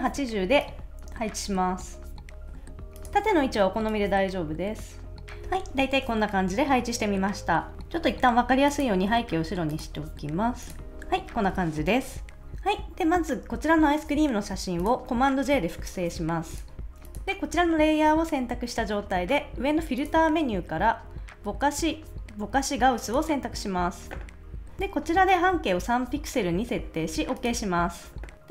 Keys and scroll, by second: 2.4 super+s, 15.5 super+j.